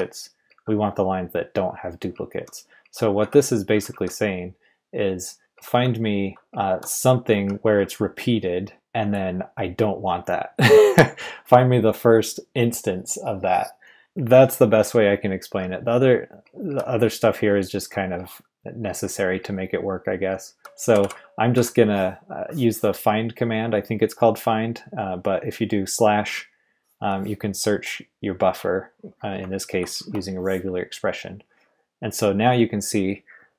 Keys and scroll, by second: 0.0-0.4 typing, 2.1-3.9 typing, 5.1-8.2 typing, 16.4-21.5 typing, 29.7 super+v.